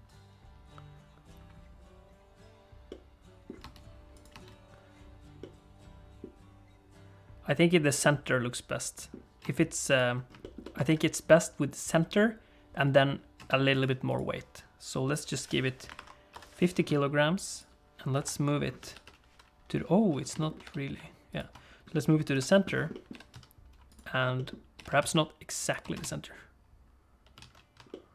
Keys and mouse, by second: 3.0 middle click, 3.8 space, 4.3 space, 5.4 middle click, 8.0-9.1 middle drag, 9.4 space, 10.4 shift+middle click, 10.6 middle click, 10.7 space, 13.4 space, 13.8 click, 15.2-16.8 drag, 18.1 KP_7, 18.9 alt+g, 20.4 shift+middle click, 20.6 g, 22.3 KP_1, 22.9 middle click, 23.1 g, 24.3 middle click, 24.7 g, 25.9 space, 27.6 alt+a.